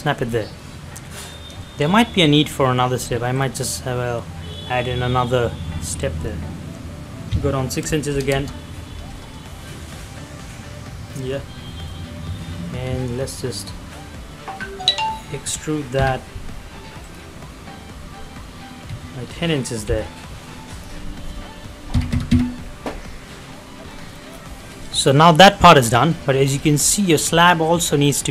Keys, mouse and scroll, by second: 0.3 scroll down 1, 0.4 middle click, 1.9-3.0 scroll up 1, 3.4 click, 7.8 click, 8.2 shift+', 8.2 Return, 10.4 middle click, 13.2 click, 15.9 t, 17.0 click, 17.0 click, 19.8 p, 20.6 click, 23.8 space, 23.9 middle click, 24.1 scroll down 1, 24.5 middle click, 25.4 middle click, 26.3 middle click, 26.6-27.2 scroll up 2, 27.5-28.3 middle drag.